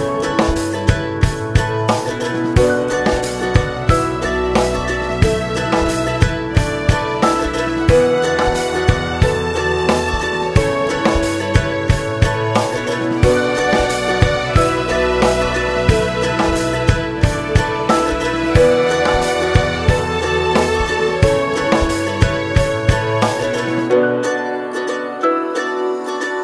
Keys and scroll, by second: 4.6 ctrl+space, 5.1 ctrl+space, 5.2 ctrl+space, 21.7 ctrl+j.